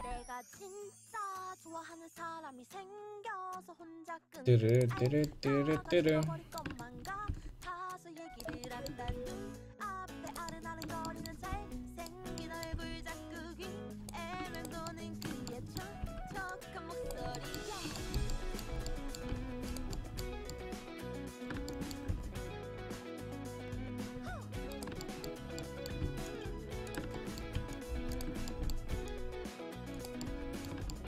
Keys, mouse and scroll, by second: 0.0 c, 4.8-6.5 drag, 5.9 right click, 6.5-10.9 middle drag, 7.4 c, 9.1 c, 11.3 middle click, 11.6 c, 12.1-14.6 drag, 12.8 c, 15.1-17.1 drag, 16.3 c, 19.0 click, 19.4 c, 20.1 middle click, 22.2 c, 26.1 c, 27.6 c, 29.0 c.